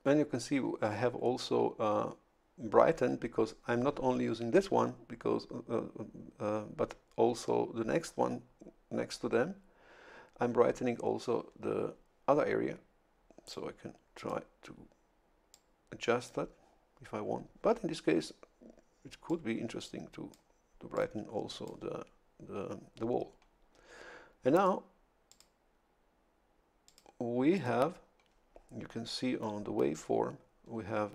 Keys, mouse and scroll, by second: 13.5 click, 15.5 click, 19.3-20.5 drag, 20.9-23.1 drag, 24.5 click, 25.3 click, 26.8 click, 27.5 click.